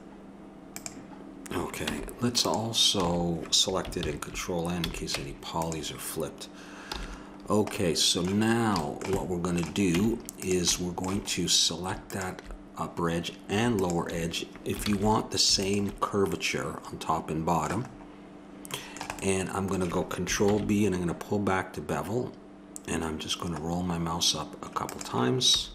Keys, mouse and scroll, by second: 1.9 Tab, 3.0 s, 3.0 a, 4.0 ctrl+n, 4.8 a, 5.7 Tab, 6.9 n, 9.9 Tab, 12.1-14.9 drag, 14.9 ctrl+z, 16.4-17.4 drag, 20.4 ctrl+b, 25.5 a.